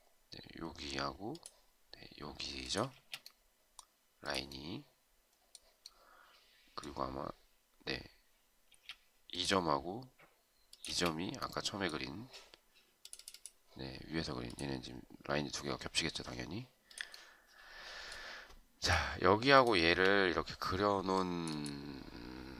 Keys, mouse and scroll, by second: 3.0 space, 8.8 space, 10.9 space, 19.6 shift+click.